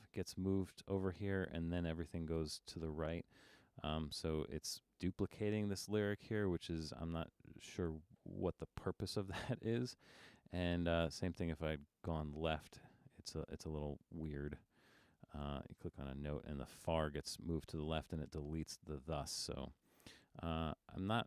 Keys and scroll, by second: 7.0 super+z, 20.0 super+z.